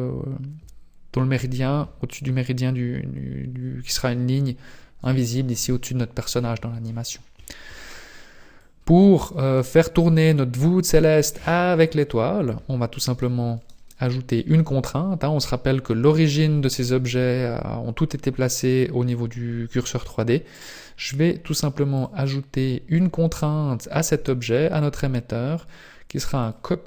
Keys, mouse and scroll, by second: 8.6 click, 10.5 click, 13.4 right click, 21.9 click, 24.4 click.